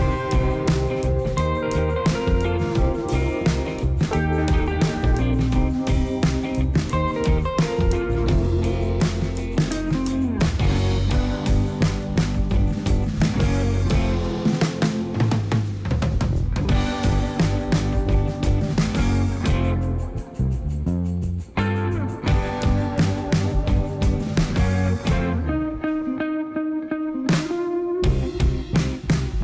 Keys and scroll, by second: 14.3 ctrl+z, 21.8 i, 28.5 i.